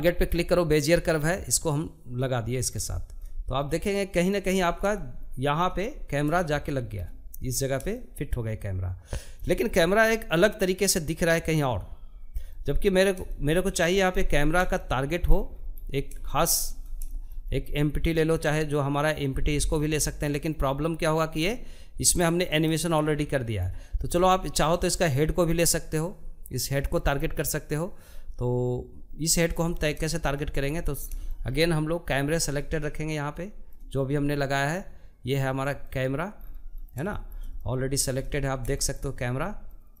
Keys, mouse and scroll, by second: 0.2-1.4 drag, 1.4-2.3 scroll down 4, 2.3 shift+middle click, 3.2-3.6 scroll up 2, 3.6 shift+middle click, 4.5-5.1 scroll up 1, 5.1-10.5 shift+middle drag, 11.1-12.8 middle drag, 12.8-13.5 scroll up 4, 13.5 shift+middle click, 14.1-14.9 scroll up 4, 14.9 shift+middle click, 15.5 scroll up 1, 15.8-23.6 shift+middle drag, 23.6 click, 28.2-28.8 scroll down 1, 28.8 shift+middle click, 29.3-30.0 scroll down 5, 30.0-34.5 shift+middle drag, 34.5 click, 35.0-35.8 scroll down 5, 35.8-36.9 shift+middle drag, 36.9-37.5 scroll up 1, 37.5-38.8 shift+middle drag, 38.8 scroll down 1, 39.1-40.0 shift+middle drag.